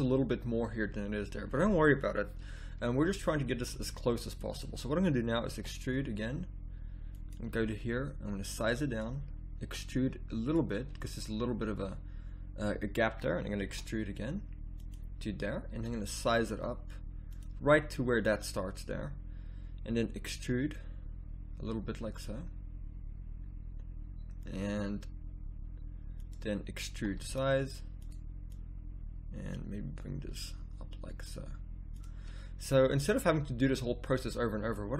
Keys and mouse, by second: 5.5 e, 7.6 s, 9.6 e, 13.0 middle click, 13.7 e, 15.7 s, 20.3 e, 26.9 e, 28.5-30.5 drag, 30.3 s.